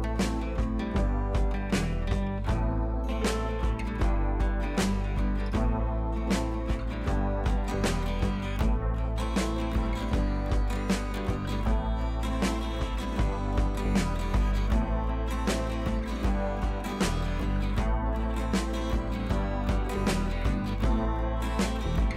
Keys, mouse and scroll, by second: 2.4 scroll up 1, 2.9 space, 3.1-3.4 drag, 4.0-6.0 space, 10.4 scroll down 1, 11.0-11.5 scroll down 1, 11.5-11.8 scroll down 1, 11.8 click, 13.8 click, 17.8 ctrl+z, 18.4 ctrl+shift+z, 19.0 ctrl+z, 19.3 click.